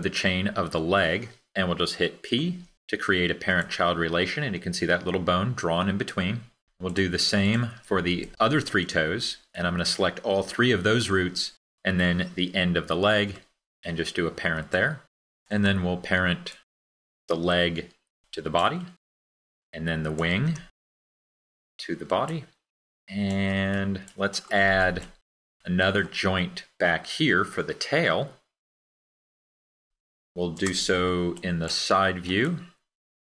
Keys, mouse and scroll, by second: 3.0 p.